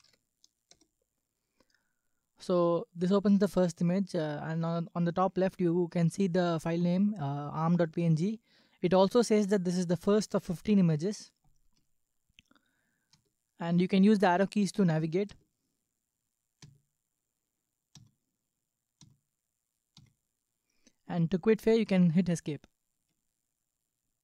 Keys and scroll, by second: 0.0-0.5 typing, 0.7 Return, 13.2 Right, 15.3 Right, 18.0 Left, 19.1 Left, 20.0 Left, 23.0 Escape.